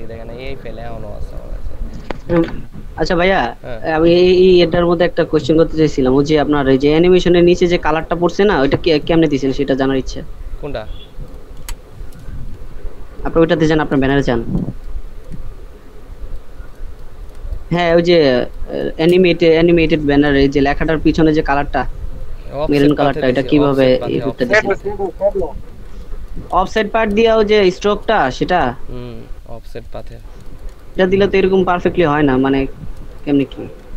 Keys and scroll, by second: 11.7 Delete, 13.4 ctrl+space, 23.1 ctrl+space, 24.2 ctrl+space, 25.1 ctrl+space, 27.2 ctrl+space, 29.9 ctrl+space, 33.0 space, 33.8 ctrl+space.